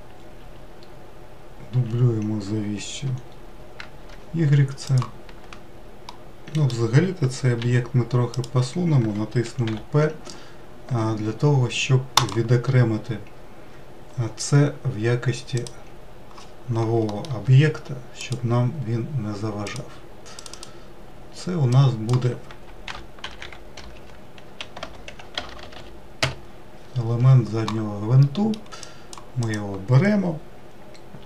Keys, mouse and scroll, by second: 5.4 shift+middle click, 6.1-7.6 middle drag, 7.6 g, 9.6 p, 15.6 click, 17.1 middle click, 17.3 Tab, 18.2 click, 19.6 click, 20.4 click, 20.5-23.7 drag, 25.5 BackSpace, 25.6 BackSpace, 28.2 middle click, 28.8 click, 29.5 click.